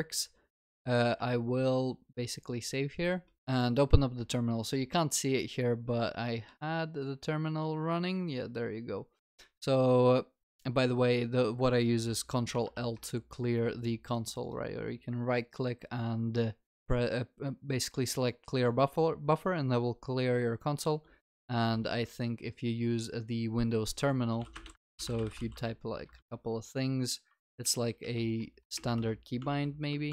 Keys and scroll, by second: 3.4 alt+F12.